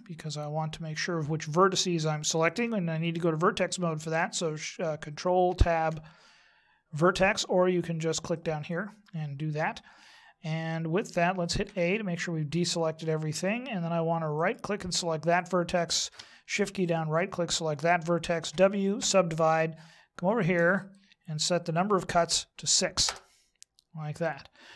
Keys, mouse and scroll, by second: 5.5 ctrl+Tab, 8.3 click, 11.6 a, 14.3 right click, 16.8 shift+right click, 18.5 w, 20.8 click.